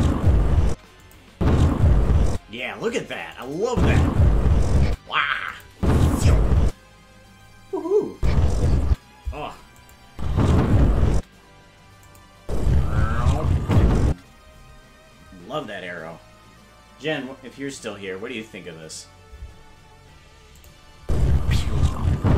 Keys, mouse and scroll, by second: 0.7 space, 1.1 click, 1.3 space, 2.3 space, 3.4 click, 3.7 space, 4.9 space, 5.5 click, 5.7 space, 6.7 space, 8.1 space, 8.9 space, 9.8 click, 10.1 space, 11.2 space, 12.1 click, 12.4 space, 20.6 click, 21.0 space.